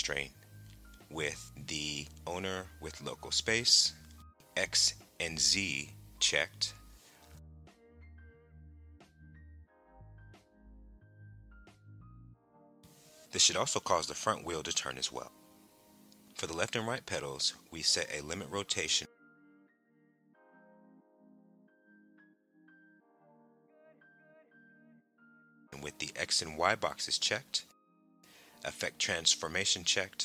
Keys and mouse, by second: 2.3-3.7 drag, 4.8 click, 6.0 click, 7.8 click, 8.6 right click, 13.0 r, 14.8 right click, 17.1 click, 18.8-21.9 drag, 25.6 click, 26.6 click, 28.4 click.